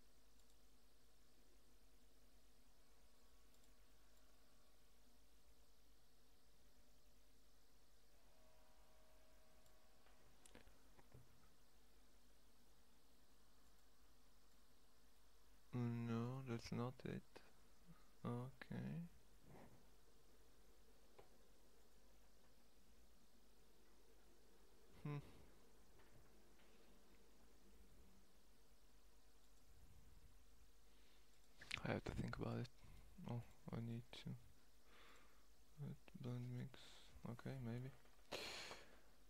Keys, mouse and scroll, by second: 18.8-21.5 middle drag, 21.5-23.2 right drag, 24.1-29.1 right drag, 32.3 right click.